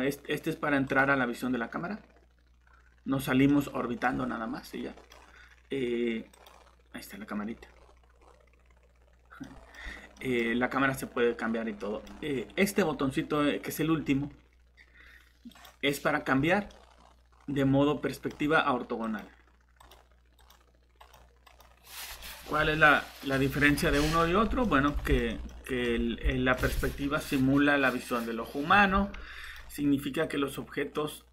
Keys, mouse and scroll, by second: 0.9 click, 3.5 middle click, 4.1 scroll down 1, 4.6 middle click, 6.3 click, 7.7-8.2 scroll up 1, 9.4 middle click, 9.8 scroll down 1, 10.1 middle click, 11.4-11.8 scroll down 1, 11.8 middle click, 15.5 click, 16.3 scroll down 1, 16.7 middle click, 19.0 click, 24.3 scroll up 1, 24.6 middle click, 25.6 typing, 29.4 click.